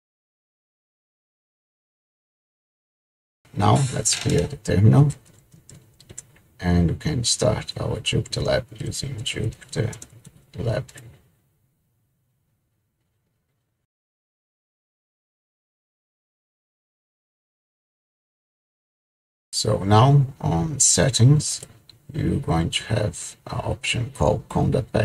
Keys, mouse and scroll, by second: 4.8-6.2 typing, 8.6-12.3 typing, 21.6 click.